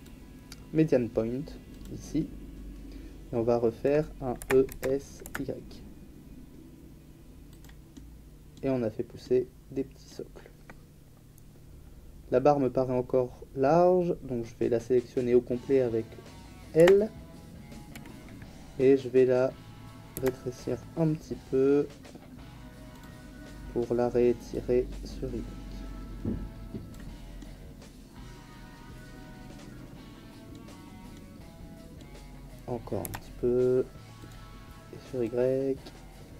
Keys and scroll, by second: 4.3 e, 4.6 s, 5.2 y, 16.7 l, 20.1 s, 33.0 s.